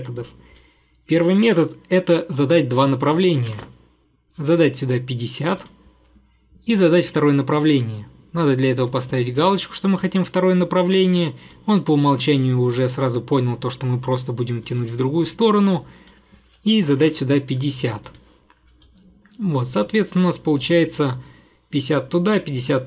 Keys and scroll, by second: 3.3-4.1 typing, 16.7-17.5 typing.